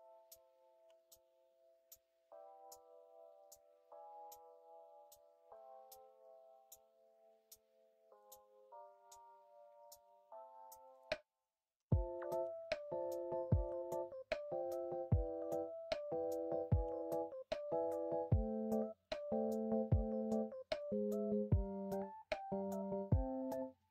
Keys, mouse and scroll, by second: 12.4 ctrl+b.